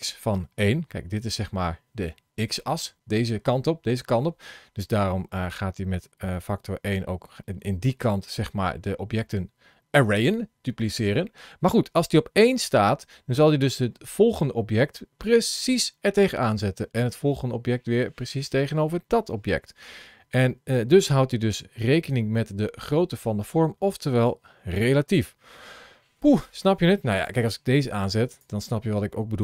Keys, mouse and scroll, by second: 27.0 click, 28.2 click.